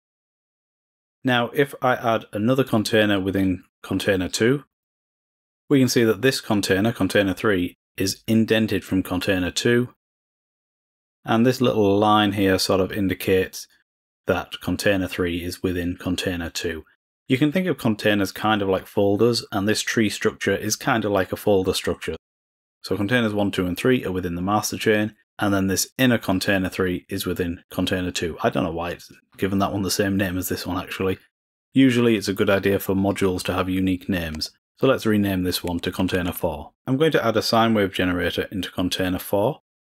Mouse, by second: 2.6-4.9 drag, 5.3 click.